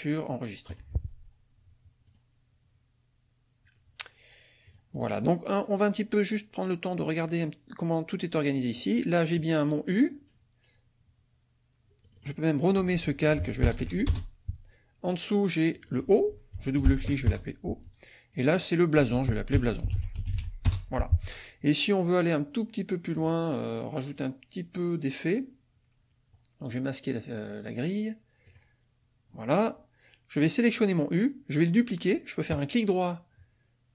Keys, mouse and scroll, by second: 0.7 click, 2.1 click, 4.7 click, 8.7 click, 12.0 click, 13.6 shift+u, 14.1 shift+Return, 15.1 click, 15.7 click, 16.9 shift+o, 17.3 shift+Return, 18.4 click, 19.3-20.8 typing, 23.2 click, 28.5 click, 30.3 click, 32.5 right click.